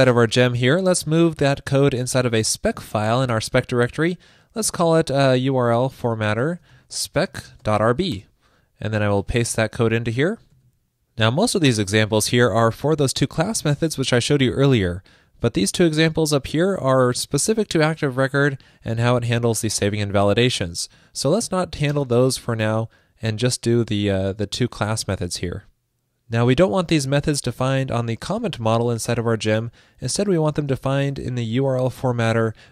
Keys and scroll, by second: 4.2 super+a, 9.2 super+v, 10.2 super+s, 29.4 super+e.